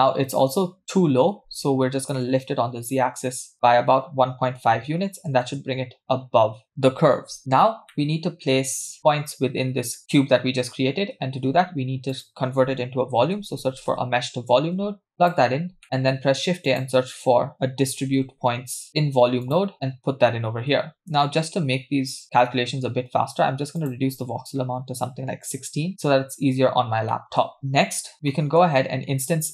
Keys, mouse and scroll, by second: 2.1-5.7 drag, 7.9-8.5 middle drag, 10.1 middle click, 10.1-10.8 scroll down 2, 11.3 shift+a, 15.8 middle click, 16.0 shift+a, 20.6-21.2 scroll up 1, 21.2 scroll up 2, 21.2-22.9 middle drag, 23.8-25.9 drag, 26.7-28.3 scroll down 4, 27.1 middle click, 28.3 middle click.